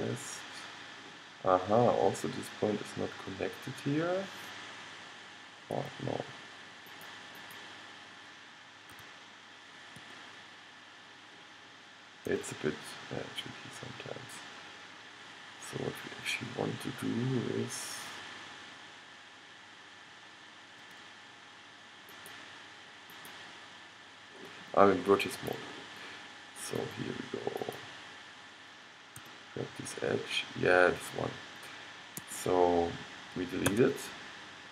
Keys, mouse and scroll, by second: 7.0-9.2 drag, 9.0 g, 12.3 g, 22.3-23.4 middle drag, 29.3 g, 33.7 x.